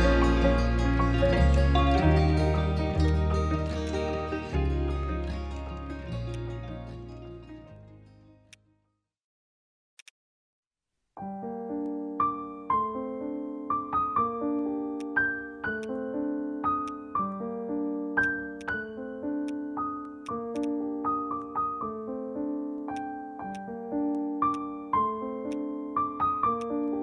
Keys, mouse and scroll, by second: 10.1 double click, 11.1-12.6 typing, 15.8 right click, 20.6 double click, 21.2-22.3 typing, 22.4 Return, 22.9 right click, 24.2 alt+middle click, 24.5 alt+click.